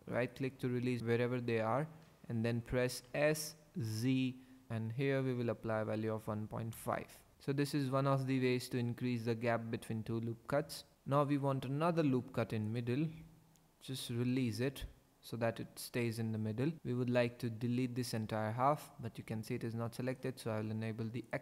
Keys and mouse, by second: 0.1 click, 3.1 s, 3.9 z, 5.5 KP_1, 5.8 KP_Decimal, 6.1 KP_5, 6.7 KP_Enter, 11.8 ctrl+r, 12.7 click, 14.3 click, 16.8 3, 21.3 click.